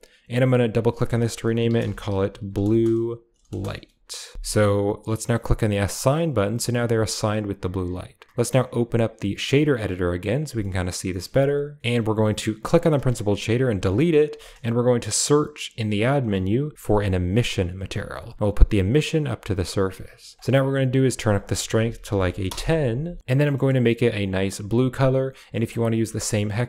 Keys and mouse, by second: 0.0 drag, 0.6-4.3 drag, 2.3 u, 2.9 BackSpace, 3.0 BackSpace, 6.0 click, 6.7 Tab, 8.4 click, 10.0 click, 10.5 middle click, 12.0 click, 12.9 click, 13.6-14.4 typing, 18.4-19.0 drag, 19.3 click, 20.9-22.4 drag, 23.2 ctrl+v, 23.5 middle click, 25.4 middle click, 26.1 middle click.